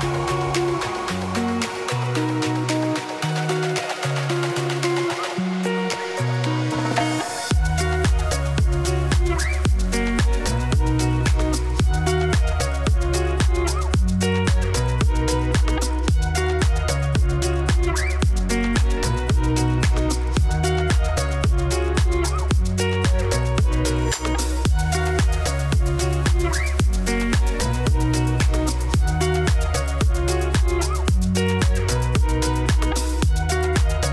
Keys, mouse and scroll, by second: 0.8 s, 2.0 a, 6.3 click, 6.9 t, 7.5 r, 8.3 click, 8.8 g, 9.6 click, 10.7 g, 11.4 click, 11.6 g, 12.4 g, 13.6 click, 13.8 g, 15.3 click, 15.4 g, 15.9 Tab, 16.1 click, 16.2 Tab, 16.6 g, 17.4 click, 17.6 click, 18.2 g, 19.0 click, 19.3 g, 20.5 click, 20.6 g, 21.0 click, 21.2 g, 22.0 click, 22.1 Tab, 22.3 click, 22.5 Tab, 22.8 g, 23.8 click, 24.2 click, 24.4 g, 25.6 Tab, 25.8 click, 26.0 Tab, 26.9 g, 27.4 click, 27.5 g, 28.5 click, 28.6 Tab, 28.7 click, 28.9 Tab, 29.4 click, 29.6 g, 30.2 click, 30.3 g, 30.6 click, 30.8 g, 31.8 Tab, 33.2 click.